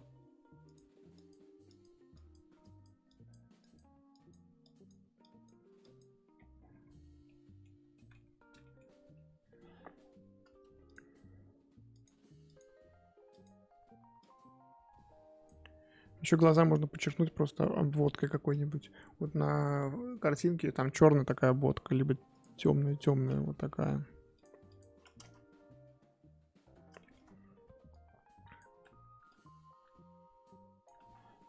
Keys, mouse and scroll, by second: 6.3-7.2 scroll down 15, 7.2 middle click, 8.2-8.5 scroll up 4, 8.6 middle click, 9.0 KP_1, 9.3 scroll up 4, 10.9 click, 11.0-11.9 scroll up 6, 11.9-16.1 drag, 16.1-16.8 scroll down 7, 16.8-20.9 scroll up 13, 22.4 click, 23.6 f, 24.6 click, 25.2 ctrl+z, 26.7 scroll down 1, 27.0 shift+middle click, 27.9 click, 28.7 ctrl+z, 29.3-31.0 drag, 31.0 ctrl+z.